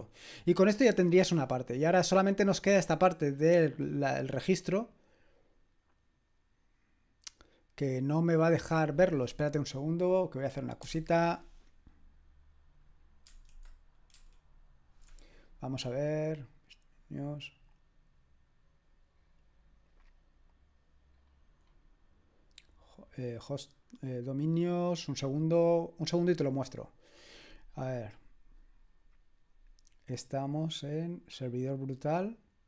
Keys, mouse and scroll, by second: 0.1-1.9 scroll down 1, 1.9 click, 4.3 click, 9.6 click, 13.4 super+!, 14.2 super+1, 17.2 click, 18.9-20.0 drag, 20.5 click, 20.5-21.3 scroll down 1, 21.3-22.4 scroll up 1, 22.4-24.4 scroll up 1, 24.4 click, 27.1 click, 29.7-30.4 scroll down 1, 30.4-31.3 scroll down 1.